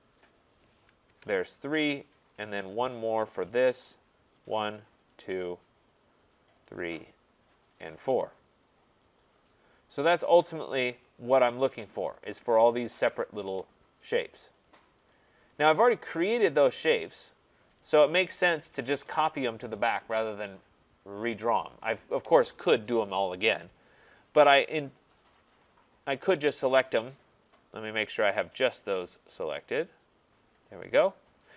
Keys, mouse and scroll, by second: 1.1 Return, 1.9-2.3 scroll, 2.7 right click, 3.0-3.6 scroll, 3.6 right click, 4.4 click, 5.1 click, 6.7 click, 7.7 click, 8.4-9.0 scroll, 10.0 right click, 11.0 click, 11.7 click, 12.3 click, 13.0 click, 13.5 click, 14.6 click, 15.1 click, 19.1 right click, 24.4 right click, 25.3 click, 26.5 click, 27.5 click, 29.0 right click, 30.1 click, 31.4 right click.